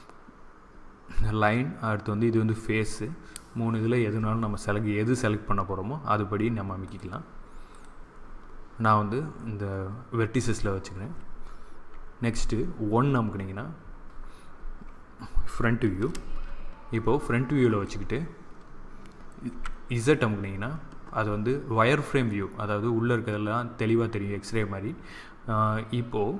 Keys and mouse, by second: 6.7-9.6 drag, 12.2 KP_1, 14.4-15.4 middle drag, 15.8 middle click, 16.8-18.7 middle drag, 19.4 z.